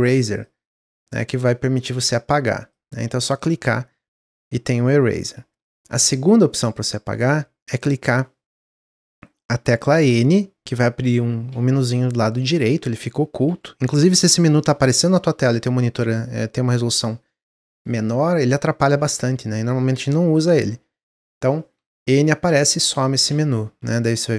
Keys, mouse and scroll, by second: 10.0-14.2 typing, 16.9 n, 18.4 n, 18.7 n, 20.9 n, 21.7 n, 22.4 n, 23.2 n.